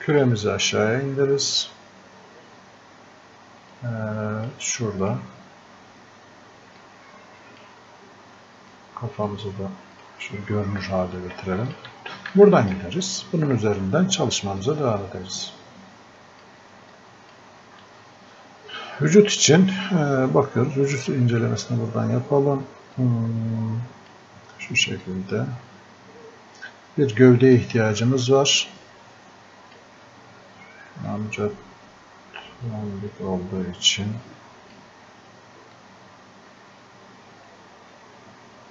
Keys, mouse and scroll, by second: 3.7-12.3 drag, 12.3-38.7 alt+drag.